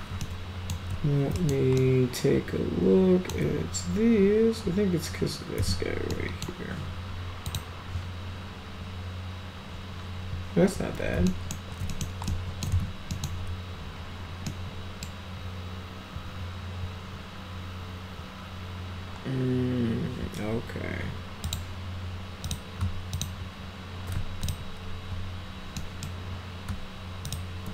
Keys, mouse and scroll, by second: 0.2 alt+middle click, 1.4 alt+middle click, 1.8-3.3 alt+middle drag, 5.6 z, 6.1-6.4 middle drag, 7.5 click, 11.3 alt+middle drag, 11.9 middle click, 12.3-12.6 alt+middle drag, 12.7 z, 13.1 middle click, 14.5-15.0 middle drag, 21.4 click, 22.5 click, 23.2 shift+click, 24.4 ctrl+click, 25.8 middle click, 27.2 shift+click.